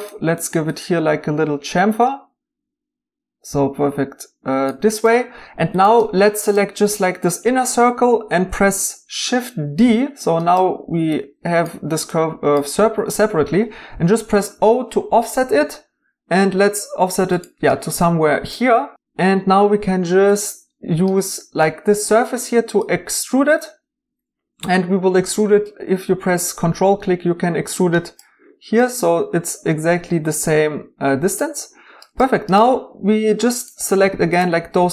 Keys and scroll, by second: 9.8 d, 14.4 o.